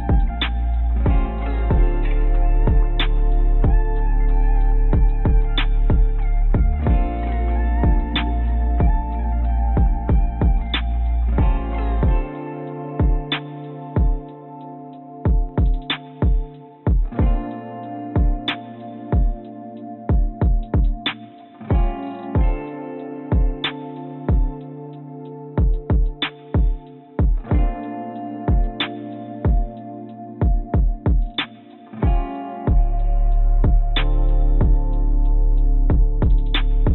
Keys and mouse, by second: 1.8-4.3 drag, 4.8 click, 5.6 shift+click, 6.4 g, 8.9 click, 9.2 click, 10.3 click, 12.7 click, 13.9 click, 15.6 Tab, 16.0 Tab, 19.8 click, 24.1 ctrl+r, 32.0 s.